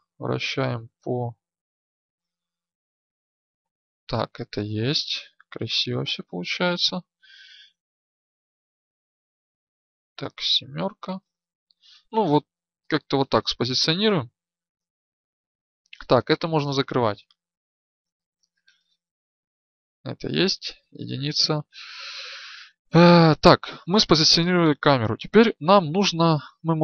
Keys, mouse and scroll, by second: 5.3-11.5 drag, 16.2-19.3 drag, 20.3 KP_1.